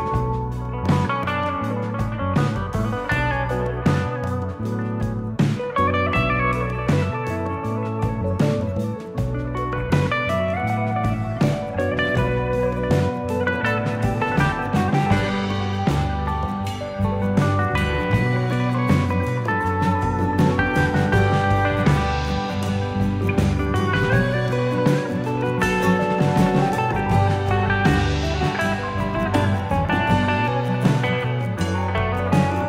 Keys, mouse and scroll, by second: 0.8 ctrl+r, 8.9 scroll up 2, 9.9 click, 9.9 scroll up 1, 10.7 shift+click, 11.7 click, 15.5 ctrl+r, 16.5 click, 17.4 click, 19.0 click, 21.3 click, 21.9-22.2 shift+click, 22.8 click, 24.2-24.8 scroll down 3, 24.8 scroll up 2, 25.7 click, 27.0 click, 27.4 shift+click, 29.4 x, 30.6-31.0 scroll up 2, 31.2 scroll up 1, 31.3 scroll down 4, 31.7 shift+middle click.